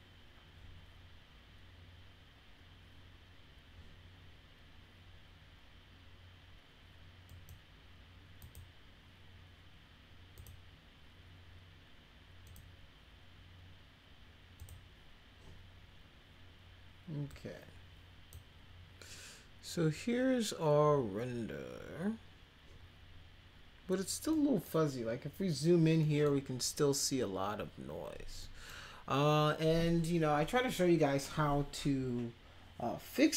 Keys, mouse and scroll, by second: 7.3 click, 8.4 click, 10.4 click, 12.4 click, 14.6 click, 17.3-18.3 drag, 24.3 middle click, 26.0 middle drag, 28.4 middle click.